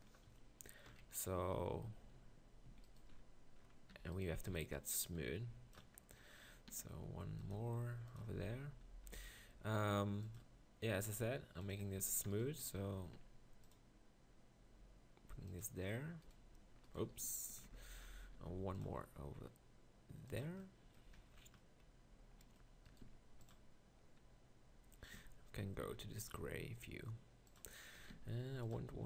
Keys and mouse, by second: 0.9 KP_1, 1.4 Tab, 1.9 Tab, 2.2 z, 2.6 z, 3.9 b, 4.5 b, 6.7 e, 7.7 s, 8.2 Tab, 12.0 Tab, 13.1 ctrl+r, 16.4 right click, 17.6 ctrl+KP_Decimal, 18.3 ctrl+r, 23.0 ctrl+r, 25.1 z, 25.8 ctrl+r, 28.3 ctrl+r.